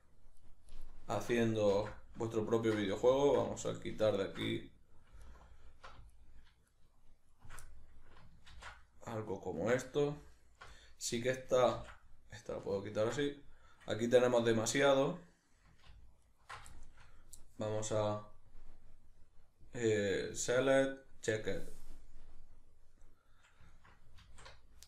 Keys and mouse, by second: 0.4 alt+shift+right click, 0.7 alt+shift+right click, 1.7 ctrl+x, 1.9-2.9 middle drag, 2.9 ctrl+z, 3.7 alt+right click, 4.1 alt+shift+right click, 5.3 alt+right click, 6.1 alt+right click, 6.7 alt+shift+right click, 7.3 alt+shift+right click, 7.6-10.3 middle drag, 8.5 ctrl+x, 10.3 alt+right click, 10.7-16.2 middle drag, 11.7 ctrl+x, 16.2 ctrl+alt+right click, 16.7-18.5 shift+middle drag, 18.5-22.1 drag, 22.1-24.8 middle drag, 24.3 alt+q.